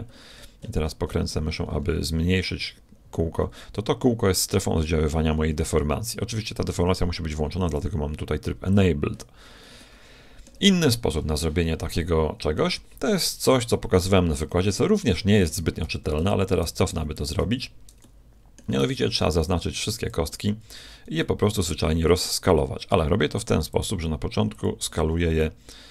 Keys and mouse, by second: 7.8-9.8 drag, 9.8 middle click, 10.4-11.6 drag, 15.8 a, 16.2 ctrl+z, 16.6-17.1 ctrl+z, 18.0-19.8 middle drag, 18.8 b, 21.2-22.6 middle drag, 22.6 click, 23.6-25.6 drag.